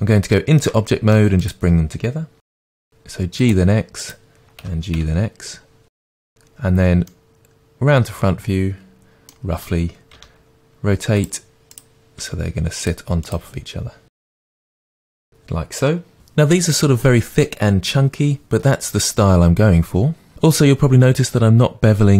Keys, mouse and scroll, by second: 1.5 click, 2.6 g, 3.5 click, 4.0 click, 4.6 g, 6.2 click, 7.1-11.2 middle drag, 10.2 r, 11.2 click, 11.8-12.2 drag, 12.2 r, 12.8 middle click, 13.2 click, 14.1 g, 14.4 click, 14.5 middle click, 14.5 r, 14.8 click, 14.9-22.1 middle drag, 15.2 scroll down 2.